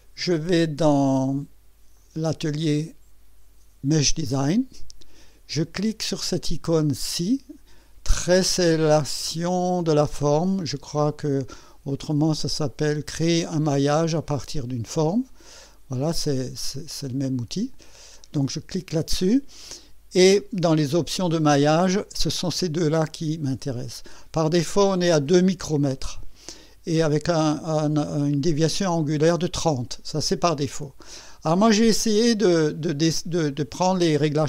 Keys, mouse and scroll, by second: 1.2 click, 2.0 click, 2.5 click, 4.0 click, 11.9 click, 17.8 click.